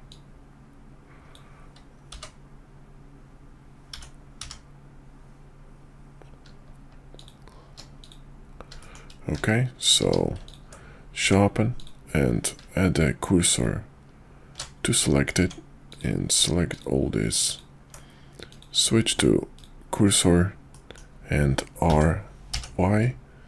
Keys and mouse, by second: 0.1-7.8 drag, 8.8 shift+middle click, 9.3 q, 10.0 q, 11.2 Tab, 13.0 shift+s, 15.4 Tab, 15.9 click, 16.7 click, 17.5 click, 18.5-19.6 drag, 20.7 middle click, 21.9 r.